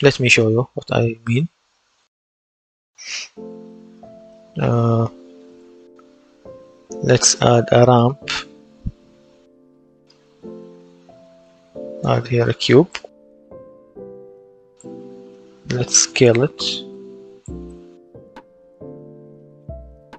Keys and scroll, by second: 0.5 s, 4.3 s, 4.5 d, 5.1 w, 13.4 w, 15.0-15.9 typing, 17.3-18.4 typing.